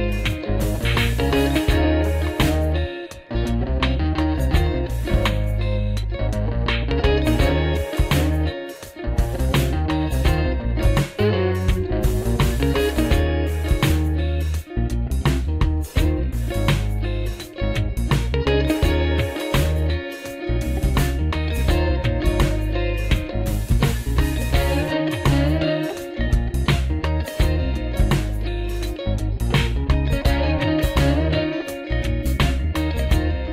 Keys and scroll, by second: 0.3 alt+Tab, 2.0 super+Left, 4.4 super+Right, 7.1-10.8 typing, 11.2 Right, 11.6 Return, 12.9 shift+g, 20.7 alt+r, 23.1-23.5 typing, 23.8 Return, 25.3 typing, 25.6 Return, 26.5-27.6 typing, 29.6 alt+r, 32.0 super+Left, 32.7 super+Left, 33.3 super+Right.